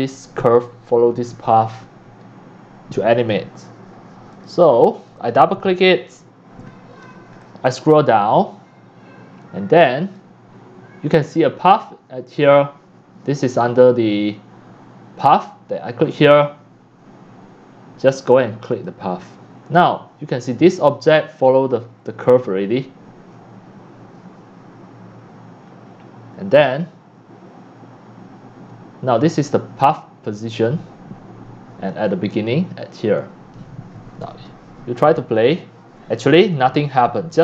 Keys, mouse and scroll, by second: 4.3 click, 4.6 click, 5.0 click, 5.2 click, 7.4-8.4 drag, 10.2 right click, 12.9 drag, 13.5 click, 16.0-18.4 drag, 18.7 click, 21.1-24.0 drag, 26.6-28.1 drag, 33.7-34.8 drag, 35.0 click, 37.3 click.